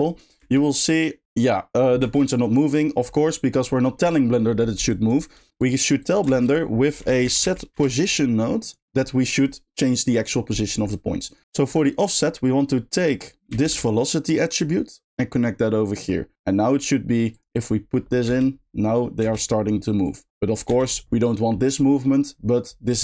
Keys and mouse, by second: 0.0 middle click, 0.4 space, 2.8 middle click, 4.5 middle click, 4.9 click, 5.4 g, 6.0 click, 6.3 shift+a, 11.3 click, 11.4 middle click, 11.4 x, 13.0 click, 14.6 shift+click, 15.2-16.1 shift+drag, 17.3 click, 18.0 middle click, 18.3 space, 20.0 click.